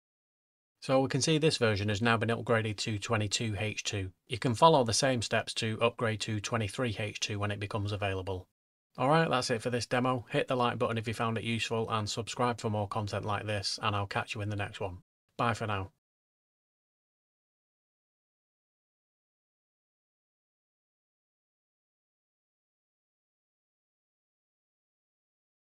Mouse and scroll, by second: 15.3 click, 15.4 click.